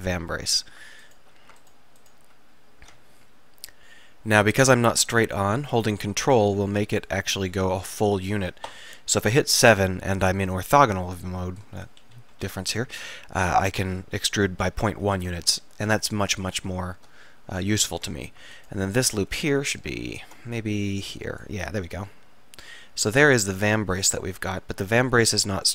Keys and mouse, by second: 1.2-2.8 drag, 2.8 e, 8.8 KP_7, 12.1 KP_5, 12.5 KP_5, 18.6-21.5 drag, 22.0-23.1 middle drag, 24.1-25.2 middle drag, 25.2 click.